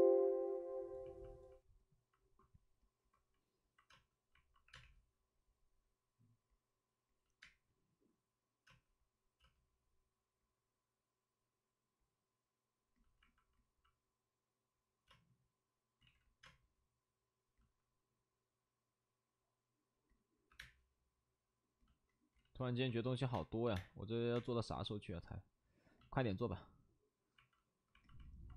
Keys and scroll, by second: 3.8 space, 4.6 space, 7.3 3, 7.4 space, 8.6 space, 15.0 space, 16.0 ctrl+z, 16.0 space, 16.4 space, 20.4 2, 20.5 space, 22.3 ctrl+z, 22.3 space, 23.1 ctrl+z, 23.3 space, 23.6 3.